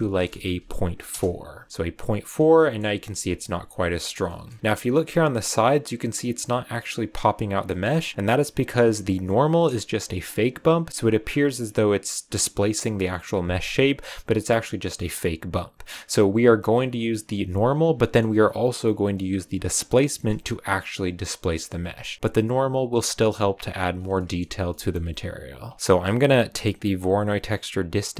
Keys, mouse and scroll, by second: 2.5 shift+middle click, 2.7-3.2 shift+scroll up 2, 4.2 shift+middle click, 4.6 scroll up 3, 7.5 scroll down 1, 7.6-8.1 middle drag, 8.1 click, 11.4 a, 14.6 scroll down 1, 15.9 click, 16.3-16.6 scroll down 2, 16.6 click, 17.8 scroll down 2, 17.9 middle click, 18.2-18.6 scroll up 1, 19.1 click, 21.3 scroll down 2, 21.5 middle click, 21.7-23.1 scroll up 3, 21.9 a, 23.1 click, 23.8-24.1 scroll down 4, 24.1 shift+middle click, 25.0 scroll down 1, 25.7 shift+middle click, 25.7-27.0 scroll up 3, 27.0 scroll up 1, 28.1 click.